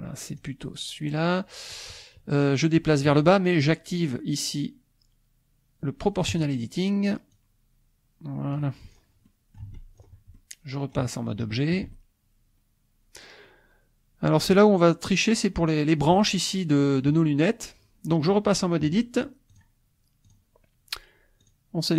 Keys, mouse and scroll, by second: 0.4 click, 6.4 click, 7.5-8.7 drag, 8.9 scroll down 1, 9.3 click, 9.7 Tab, 9.9 scroll down 1, 10.4 click, 11.4 shift+click, 12.3-15.0 middle drag, 15.5 click, 19.5 click, 20.3 click, 21.4 click.